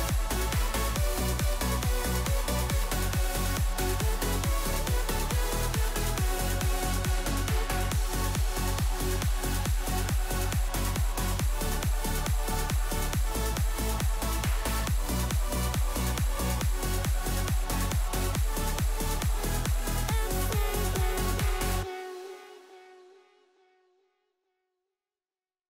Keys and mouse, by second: 0.5 ctrl+z, 1.3 click, 2.4 click, 3.0-5.2 drag, 6.4 ctrl+s, 11.8 click, 12.8 click, 19.5 ctrl+s, 21.0 click, 22.2 click, 24.4 ctrl+s, 25.4-25.6 drag.